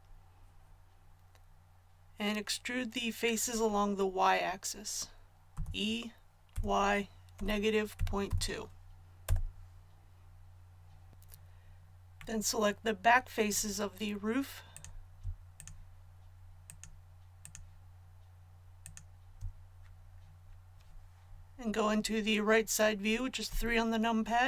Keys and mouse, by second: 5.5 e, 23.4 KP_3.